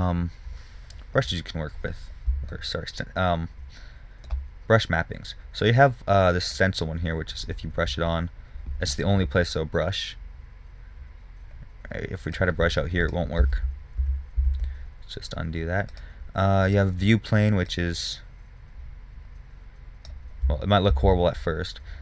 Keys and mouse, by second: 1.0 middle click, 3.2 middle drag, 3.8 middle click, 7.5 click, 8.7 click, 10.7 click, 12.6-13.9 middle drag, 13.9 ctrl+z, 14.5 ctrl+z, 14.8 ctrl+z, 18.3-20.0 drag, 20.8 middle click, 21.4 ctrl+z.